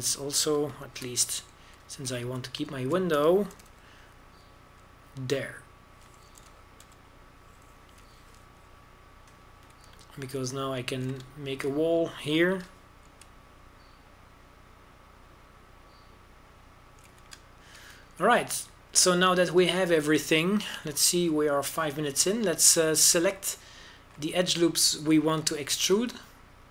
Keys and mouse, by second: 0.3 a, 0.6 a, 1.5 middle click, 2.7 ctrl+b, 4.2 a, 4.6 right click, 5.4 g, 5.7 right click, 8.3 g, 11.7 a, 12.7 right click, 13.2-14.4 middle drag, 14.4 ctrl+b, 18.9 a, 24.7-26.7 drag.